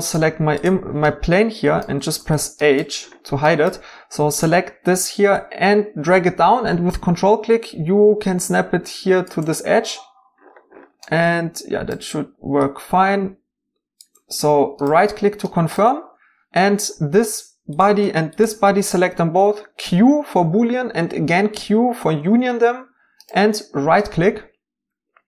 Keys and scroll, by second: 2.2 h, 19.8 q, 21.5 q.